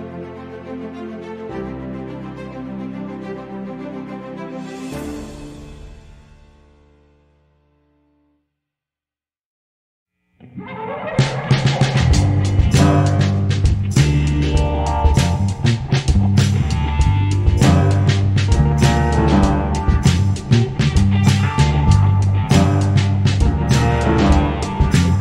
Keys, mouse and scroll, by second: 0.1 g, 1.7 s, 2.4 KP_7, 2.5 KP_5, 2.7 s, 3.8 z, 4.0 z, 4.6 x, 7.2 z, 7.3 z, 7.8 k, 11.8 middle click, 14.4 middle click, 15.1 e, 16.6 middle click, 16.7 middle click, 19.1 KP_5, 19.8 KP_Decimal, 20.3 z, 21.6 z, 23.4 k, 23.8 KP_5, 24.2 z.